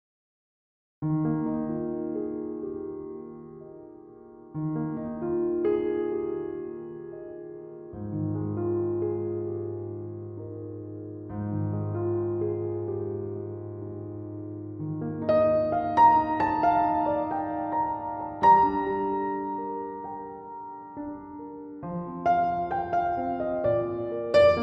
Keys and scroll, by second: 5.7 typing, 11.1-11.8 typing, 21.9 BackSpace.